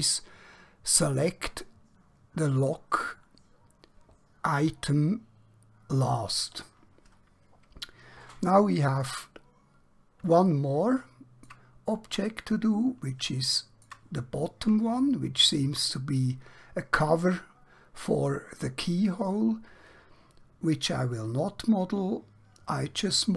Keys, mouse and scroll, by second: 9.0-9.7 scroll down 1, 9.7 scroll up 1, 10.6 shift+middle click, 12.0 scroll up 1, 13.4 shift+middle click, 14.2-14.8 scroll down 1, 15.0 shift+middle click.